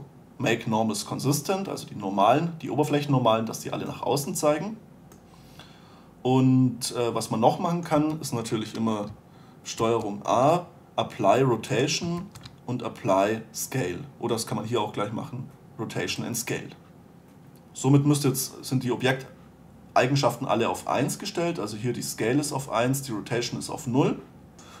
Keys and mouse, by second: 8.3 Tab, 10.1 ctrl+a, 17.6-24.8 middle drag.